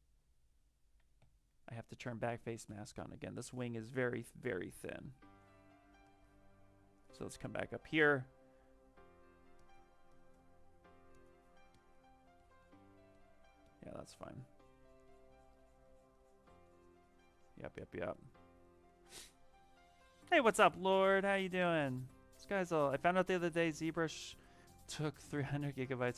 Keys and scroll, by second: 1.1 ctrl+z, 2.2 ctrl+z, 2.5 ctrl+z, 4.9 ctrl+z, 5.1 ctrl+z.